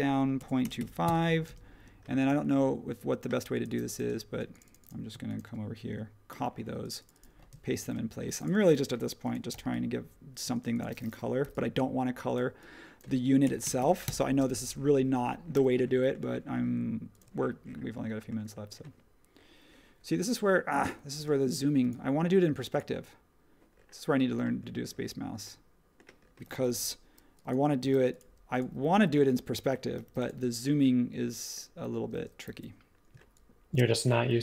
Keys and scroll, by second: 0.1-1.2 typing, 6.3 super+c, 7.8 shift+v, 9.5 p, 10.4 space, 11.4 p, 13.2-14.3 typing, 15.5 typing, 21.1 space, 26.8 n, 27.8 b, 28.9 e, 30.0 b, 32.0-32.4 typing, 34.3 super+z.